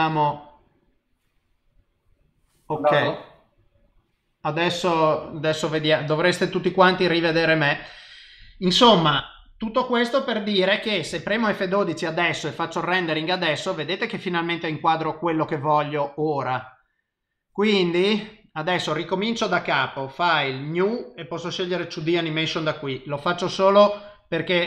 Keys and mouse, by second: 11.2 F12, 19.5 click.